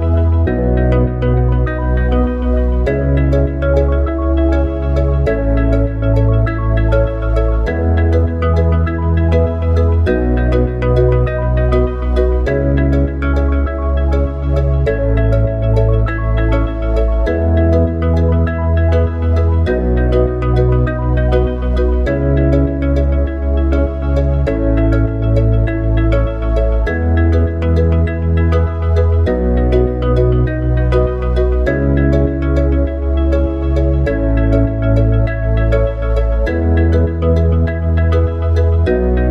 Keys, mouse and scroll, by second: 2.5-7.2 drag, 14.0 shift+a, 15.6 click, 18.5 KP_1, 20.7 s, 22.6 s, 29.5 click, 32.6 click, 36.5 KP_1, 37.4 KP_3.